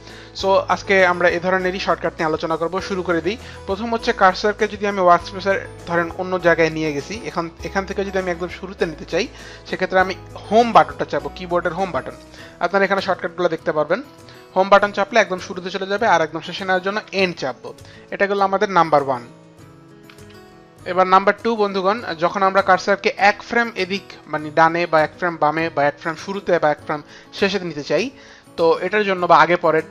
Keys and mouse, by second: 4.8 click, 5.5 click, 6.6 space, 6.7 click, 10.0 Home, 16.6 End, 22.1 click, 25.7 click.